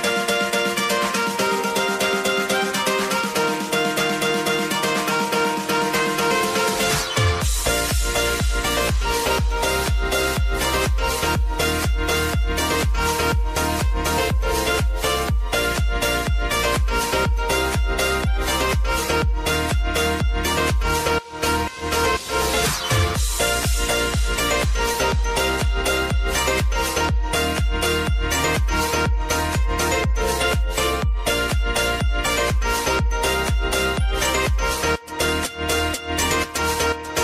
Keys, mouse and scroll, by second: 0.8 click, 2.5 ctrl+c, 2.7 ctrl+v, 3.4 click, 4.9 F9, 5.5 click, 5.8 F9, 7.1 alt+click, 7.7-8.9 typing, 9.0 Down, 9.4 Return, 11.0 click, 12.5-14.6 typing, 15.0 click, 17.1 Up, 19.2 click, 19.7 Right, 21.3 click, 22.6 ctrl+c, 22.8 ctrl+v, 24.8 click, 25.1 F8, 26.9 F9, 27.1 click, 27.4 F9, 28.6 alt+click, 29.1-30.2 typing, 30.4 Down, 30.8 Return, 32.0 click, 33.6-36.4 typing.